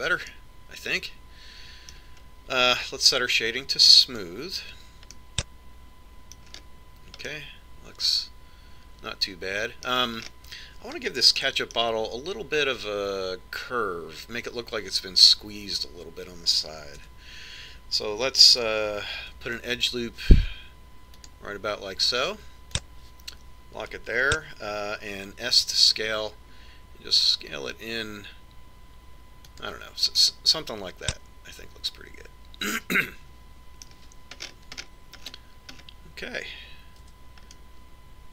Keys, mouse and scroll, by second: 5.3 click, 6.5-10.4 middle drag, 11.7-14.6 middle drag, 18.4 Tab, 20.7 ctrl+r, 27.0 s, 31.7-33.7 middle drag, 35.9-38.3 middle drag.